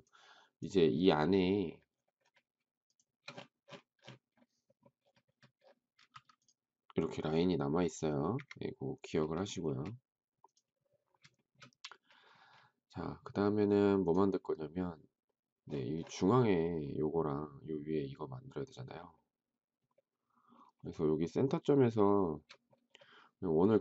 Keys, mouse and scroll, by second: 2.8 shift+click, 6.1 m, 8.2 Escape, 9.6 space, 11.3 shift+middle click, 22.1 shift+middle click.